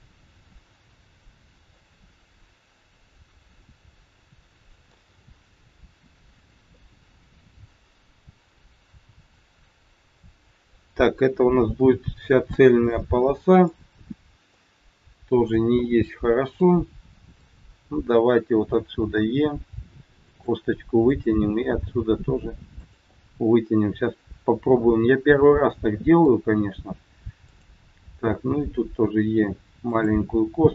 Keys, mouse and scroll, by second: 1.1-1.7 scroll up 2, 1.7 middle click, 4.0 middle click, 6.7 middle click, 11.7 middle click, 12.9 middle click, 14.4 middle click, 15.8 middle click, 17.4 click, 19.1 e, 21.1 click, 21.6 e, 23.2 middle click, 27.3 click, 28.3 e.